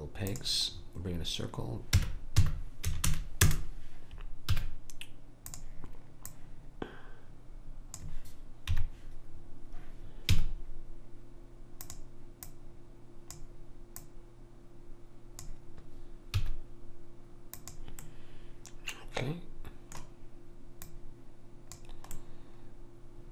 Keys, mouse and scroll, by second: 1.9 r, 4.5 s, 6.3 click, 8.7 KP_Decimal, 10.4 s, 12.5-15.9 drag, 16.4 s, 18.0-19.3 middle drag, 20.8 click, 22.2-23.3 middle drag, 22.2 right click.